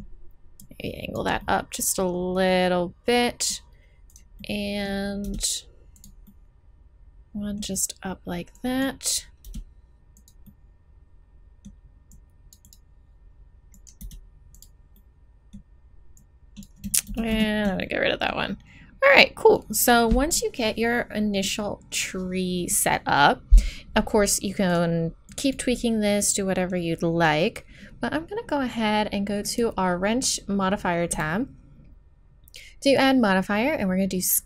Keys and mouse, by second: 2.1 middle click, 3.6 right click, 5.2 e, 7.1 click, 9.4 e, 10.4 middle click, 12.1 middle click, 12.2 click, 14.0 e, 15.0 middle click, 16.2 click, 17.1 ctrl+z, 17.4 ctrl+z, 24.7 click, 25.7-27.6 middle drag, 32.9 click.